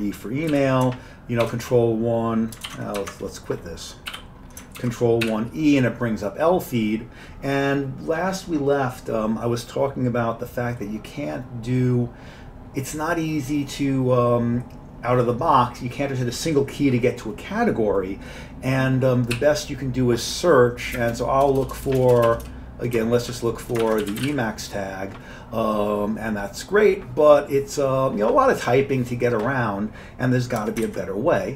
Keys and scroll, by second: 0.5 q, 1.4 ctrl+1, 2.7 ctrl+super+g, 4.2 y, 4.8 ctrl+1, 5.3 e, 19.4 s, 21.0-22.3 typing, 23.8-24.8 typing, 30.9 ctrl+g.